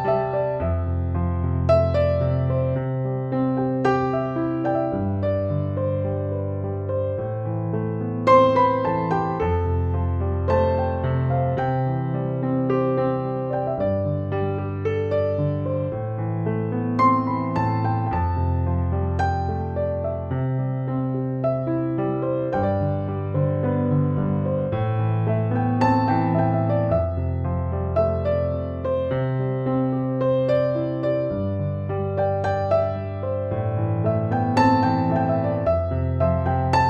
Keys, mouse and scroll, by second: 2.9 space, 3.2 click, 3.4-4.2 space, 4.8 ctrl+shift+i, 5.2 Tab, 5.6 space, 5.9 click, 6.1-6.6 space, 6.6 click, 12.0 click, 12.2 alt+click, 12.6 alt+click, 12.7-13.2 typing, 12.8 click, 13.4 click, 14.2 alt+click, 14.6 Tab, 15.0 ctrl+=, 15.2-36.8 typing, 15.4 click, 15.7 click, 16.2 click, 16.4 click, 17.2 click, 18.6 ctrl+z, 18.9 ctrl+=, 19.4 click, 19.8 alt+click, 21.1 click, 21.7 click, 22.0 click, 22.3 ctrl+=, 22.7 click, 23.3 click, 23.6 click, 25.4 click, 26.4 click, 26.8 alt+click, 29.7 click, 29.9 click, 31.9 click, 34.2 click, 34.6 click, 35.8 click, 36.1 click, 36.3 ctrl+z, 36.6 click.